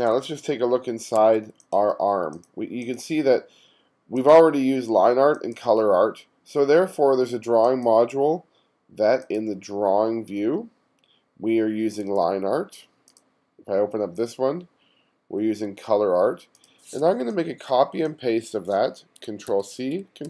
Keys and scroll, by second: 1.2 1, 1.7 1, 17.3 space, 19.5 super+c.